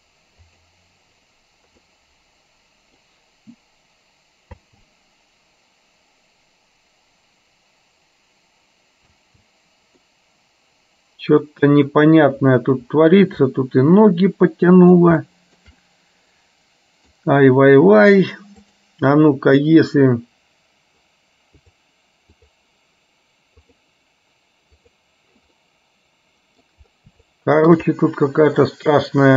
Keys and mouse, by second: 2.0 space, 2.1-3.5 middle drag, 4.9 space, 9.3 space, 10.1-12.0 middle drag, 13.5-15.0 shift+middle drag, 15.3 shift+middle click, 15.8-17.1 middle drag, 21.6 click, 23.8 click, 25.0 click, 25.6-26.8 middle drag, 27.4 shift+middle click, 28.0 middle click.